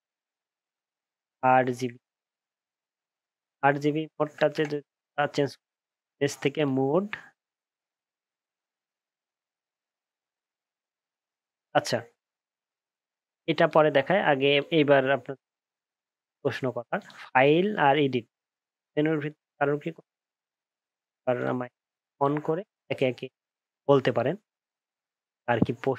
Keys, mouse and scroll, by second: 2.3 super+-, 2.4 super+-.